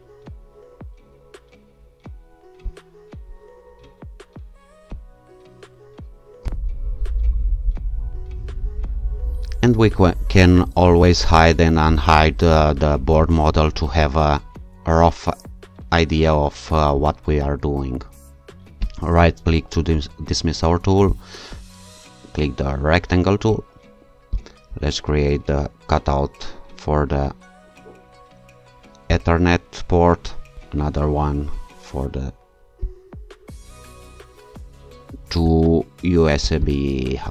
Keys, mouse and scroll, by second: 2.7 click, 4.9 click, 6.4 ctrl+r, 7.2 click, 11.4 click, 19.1 shift+right click, 21.1 click, 24.3 click, 29.1 click, 30.5 click, 32.8 click, 36.4 shift+click.